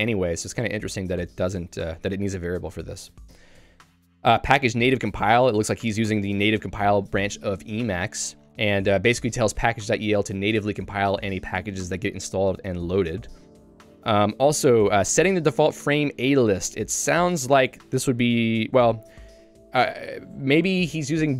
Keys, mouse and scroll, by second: 0.1 j, 1.0 k, 3.3 q, 4.0 j, 6.3 Return, 8.9 j, 9.3 k, 11.0 q, 11.7 j, 15.0 k, 17.5 j, 17.8 k, 18.8 j.